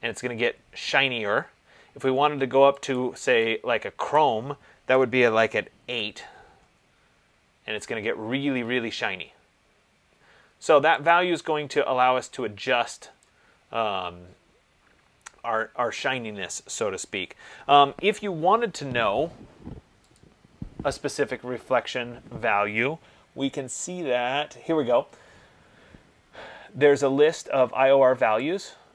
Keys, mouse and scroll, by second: 3.3 click, 4.3 click, 5.0-6.1 typing, 6.7 Tab, 11.5 click, 13.8 click, 20.4 click, 22.1-25.3 scroll, 28.8 click.